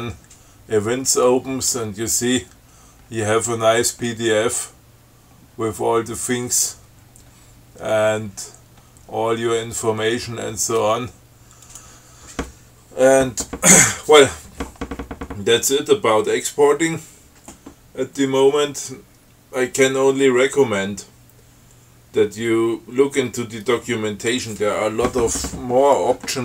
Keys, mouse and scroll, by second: 1.5-2.2 drag, 2.3-3.0 scroll down 2, 3.3-4.4 scroll down 6, 5.0-5.4 scroll up 2, 5.7-6.1 scroll up 2, 6.8-7.2 scroll down 2, 8.4 scroll up 2, 8.9 scroll up 2, 10.5-11.1 scroll up 2, 11.9 click.